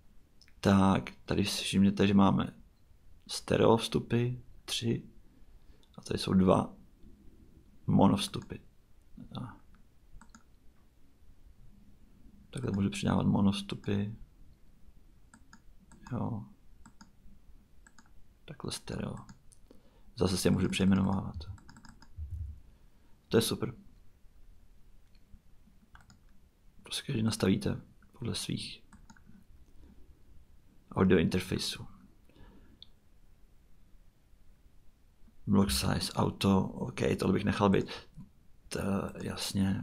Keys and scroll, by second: 21.3-22.9 typing.